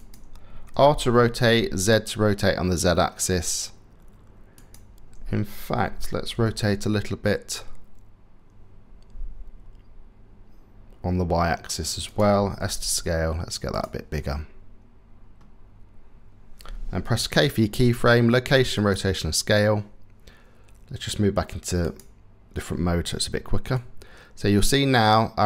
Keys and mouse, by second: 0.3 r, 5.4 r, 12.3 s, 13.8 middle click, 16.7 k, 23.6-25.4 drag.